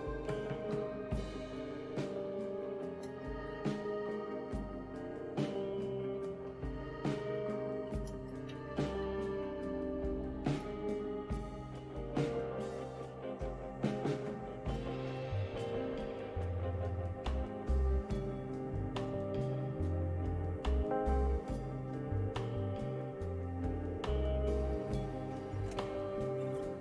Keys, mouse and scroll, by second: 0.0-3.2 typing, 5.1-11.1 typing.